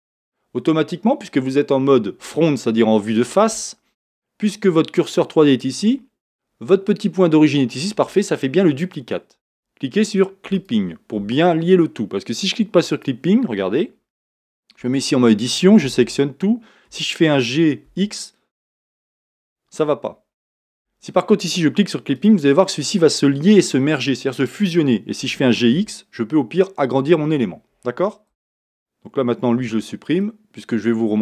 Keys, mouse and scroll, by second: 0.0-31.2 drag.